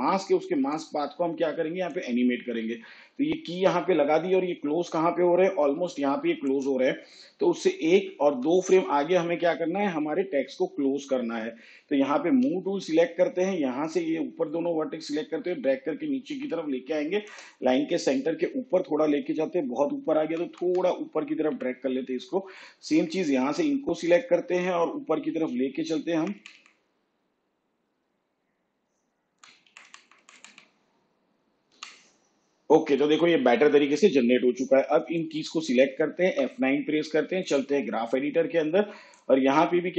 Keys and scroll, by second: 7.7 ctrl+Left, 12.4 v, 20.1 Up, 24.8 Up, 31.8 Up, 36.3 F9.